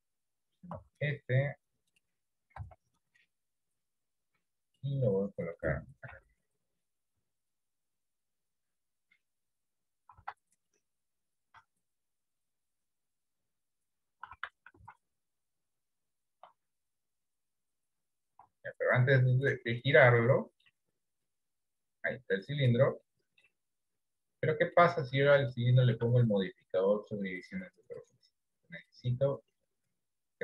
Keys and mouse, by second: 0.8 s, 2.7 KP_1, 4.4 click, 5.1 middle click, 6.3 KP_3, 7.2 s, 8.6-9.6 drag, 10.1 s, 14.4 s, 16.5 r, 18.5 ctrl+z, 19.4 middle click, 20.4 middle click, 21.3 click, 22.3 middle click, 23.1 middle click, 24.7 middle click, 25.7 shift+middle click, 26.8 click, 28.0-29.0 drag.